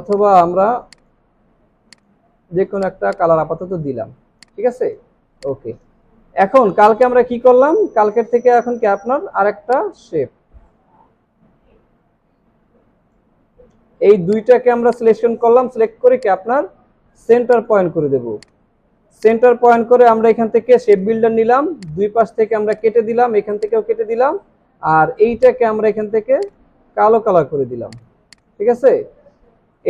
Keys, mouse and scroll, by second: 3.0 space, 4.3 space, 4.4 alt+scroll down 1, 4.8 space, 5.3 space, 21.9 alt+click, 28.3 double click.